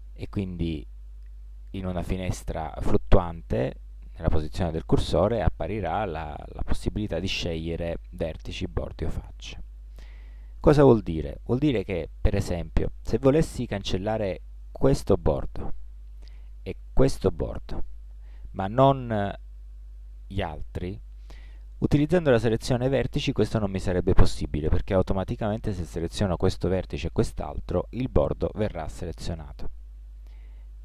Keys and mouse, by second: 14.1-16.9 right drag, 16.0 a, 16.9-19.5 middle drag, 21.5-23.9 middle drag, 30.3 a.